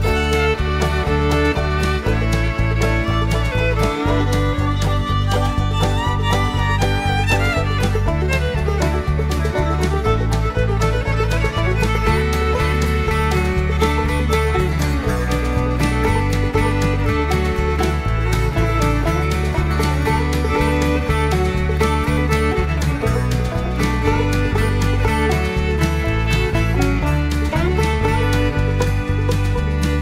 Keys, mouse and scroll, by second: 0.4 scroll down 1, 0.6 middle click, 1.1 scroll up 1, 4.1-4.4 scroll down 2, 6.2 click, 7.6 right click, 8.6-30.0 drag.